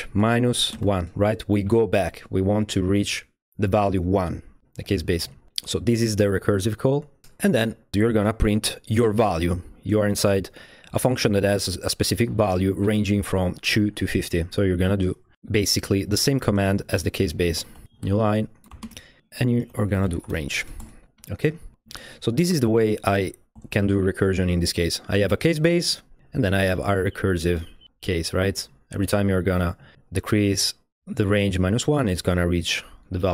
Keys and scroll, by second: 0.0-1.0 typing, 7.2 Escape, 7.9 typing, 8.1 Return, 16.3-23.2 typing, 16.8 Left, 18.6 Right, 20.8 Escape, 21.1 Down, 21.6 Down, 21.7 Down, 21.9 Down, 22.0 Down, 23.6 Escape.